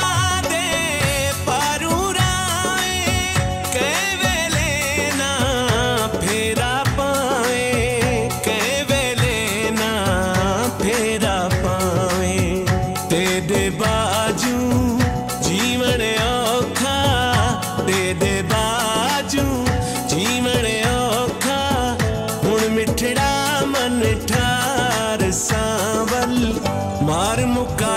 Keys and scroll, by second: 1.0-4.1 typing, 5.1 i, 5.4 n, 10.0 BackSpace, 11.4 r, 12.8 ctrl+s, 13.7 Return, 14.4 Left, 18.7 alt+space, 23.6 ctrl+s.